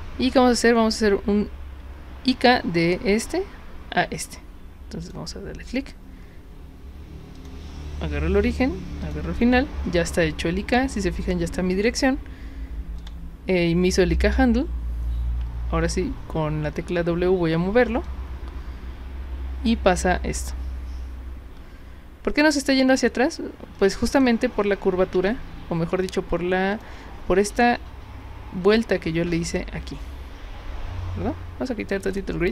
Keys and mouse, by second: 5.0 click, 7.3 click, 9.0 click, 13.0 click, 14.1 click, 15.8 w, 18.1-24.2 drag, 25.3 z, 25.9 z, 26.7 click, 32.1 click.